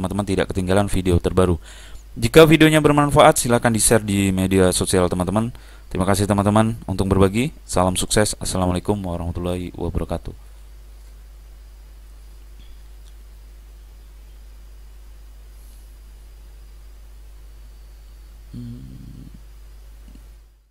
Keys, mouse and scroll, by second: 20.3 middle click.